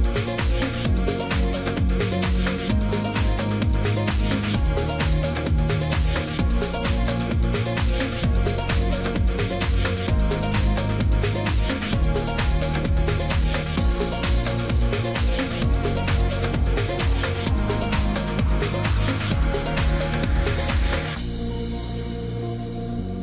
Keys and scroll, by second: 18.8 ctrl+g.